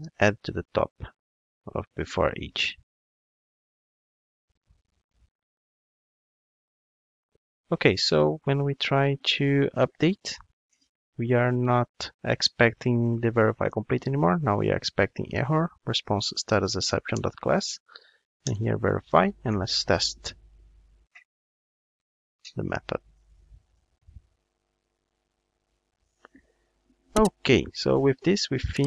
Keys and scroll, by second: 4.6 super+v, 14.8 Return, 19.1 ctrl+shift+d.